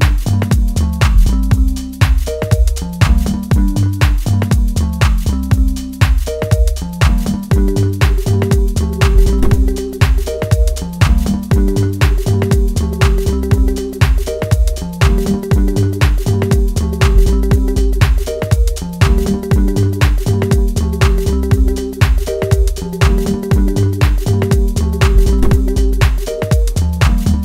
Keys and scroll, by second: 0.9 F2, 3.3 F2, 11.7 F3, 15.4 F2, 25.4 F3.